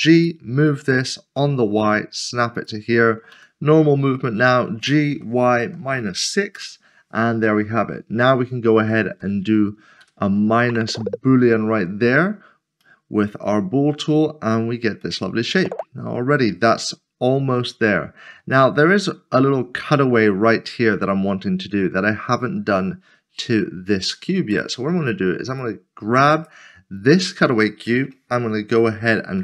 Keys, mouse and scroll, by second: 0.2 click, 1.4 typing, 2.5 click, 3.3 typing, 4.7-6.1 typing, 6.5 Return, 7.4 scroll down 1, 8.2 click, 8.9 shift+click, 10.0 ctrl+-, 10.9 middle click, 12.3 scroll up 1, 12.8 middle click, 14.5 scroll down 1, 15.0 middle click, 24.5 click.